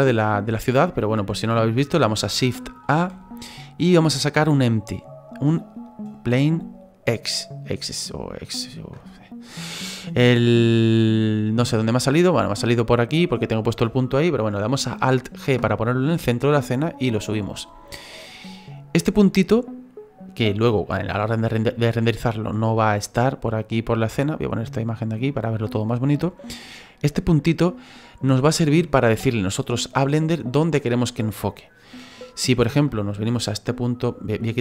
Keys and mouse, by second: 7.2 click, 15.3 alt+g, 16.7 click, 18.1 middle click, 19.0 click, 20.5 click, 21.1 middle click, 22.8 click, 24.3 click, 25.0 middle click, 27.6 click.